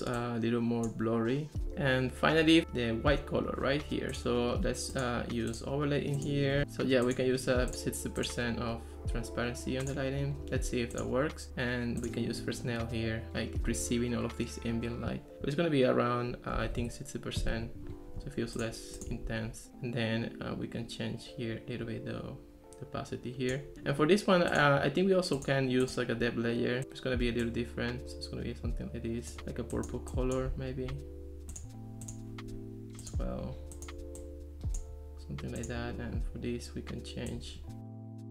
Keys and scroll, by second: 16.4-17.2 typing.